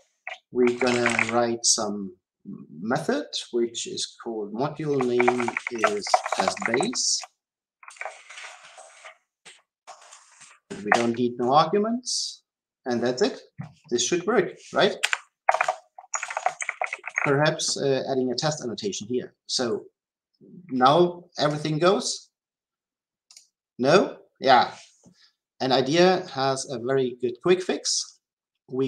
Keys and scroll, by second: 10.7 ctrl+x.